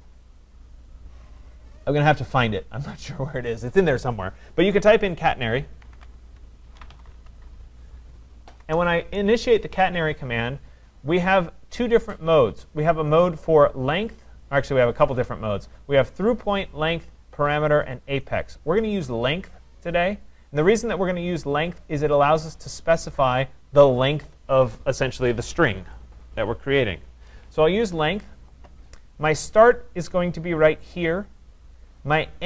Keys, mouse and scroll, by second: 3.3 click, 5.9-7.7 typing, 8.6 Return, 14.1 click, 22.2 click, 31.0 click.